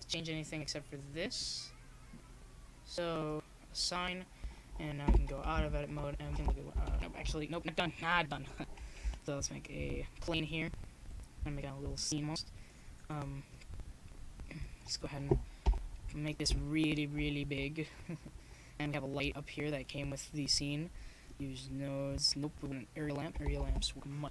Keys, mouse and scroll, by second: 0.0-1.8 drag, 2.1-4.5 drag, 13.3-15.1 drag, 15.6 ctrl+i, 17.8-19.9 drag.